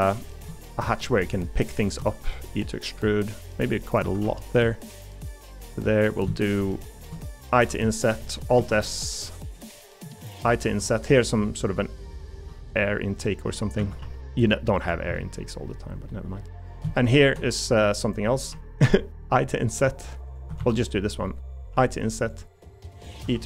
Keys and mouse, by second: 4.0 a, 4.2 g, 5.6 middle click, 8.2 middle click, 8.6 alt+s, 10.7 i, 11.4 middle click, 12.5 e, 13.8 a, 14.0 g, 15.1 middle click, 16.1 middle click, 17.0 shift+click, 17.7 middle click, 20.6 ctrl+z, 21.7 i, 22.6 middle click, 23.2 e.